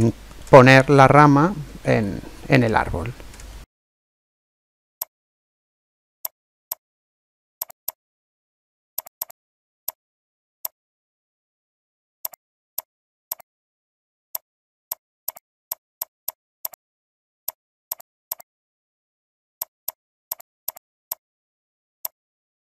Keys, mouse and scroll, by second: 2.3-2.6 scroll up 1, 2.6-4.0 middle drag, 4.4 r, 5.1 middle click, 5.7 r, 6.7 click, 7.1 r, 7.9 click, 8.1 middle click, 8.7 r, 9.2 click, 9.7 middle click, 9.9 click, 10.4 s, 10.7-12.1 middle drag, 11.9 r, 12.4 middle click, 12.8 click, 13.0 middle click, 13.7-15.1 middle drag, 14.3-17.1 drag, 17.5 click, 18.3 click, 18.8 r, 19.9 click, 21.4 middle click, 22.0 click.